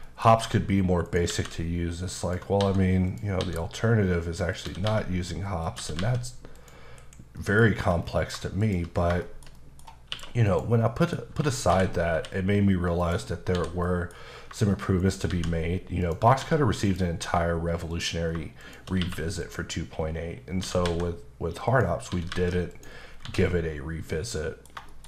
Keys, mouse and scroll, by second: 0.0 shift+middle click, 1.0 shift+right click, 1.3 shift+a, 2.2 click, 2.6 s, 3.1 click, 3.4 s, 4.5 click, 4.6-6.0 typing, 5.6 click, 6.5 click, 7.0 KP_Decimal, 7.3 scroll up 1, 7.4 middle click, 7.6-8.6 scroll down 6, 8.6 shift+click, 8.9 scroll down 2, 9.2 shift+middle click, 10.1 q, 10.5 click, 10.9 middle click, 11.7-12.1 typing, 13.0 click, 13.4 scroll down 1, 13.5 h, 13.8 middle click, 14.2 scroll up 1, 15.0 shift+right click, 15.3 shift+a, 16.0 click, 16.4 s, 16.8 click, 17.2 s, 17.9 click, 18.6 shift+click, 18.9 click, 19.0 q, 19.4 click, 19.9-20.6 scroll down 2, 20.6 typing, 21.7 click, 22.1-23.2 typing, 22.7 click, 23.1 scroll down 2, 23.5 middle click, 24.9 shift+middle click.